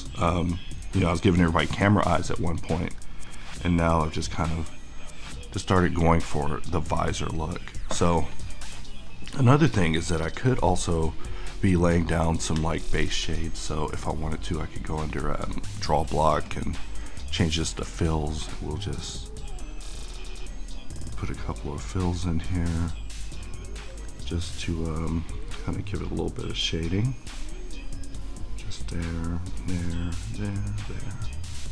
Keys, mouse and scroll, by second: 8.2-13.3 middle drag, 13.3-31.7 drag.